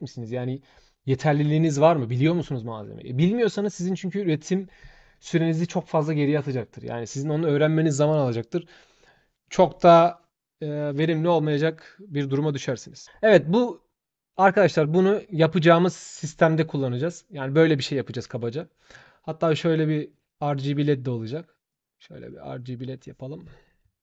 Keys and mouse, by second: 19.9 click, 21.5 shift+click, 22.3 shift+click, 22.6 shift+click, 22.7 shift+click.